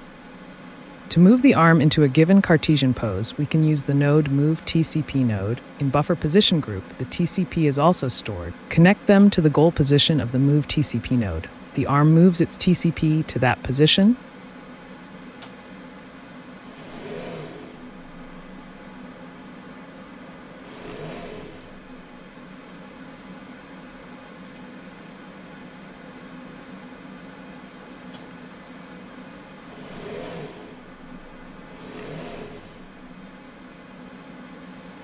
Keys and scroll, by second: 1.0 typing, 9.2 ctrl+d, 15.4 typing, 20.3 t, 28.1 t.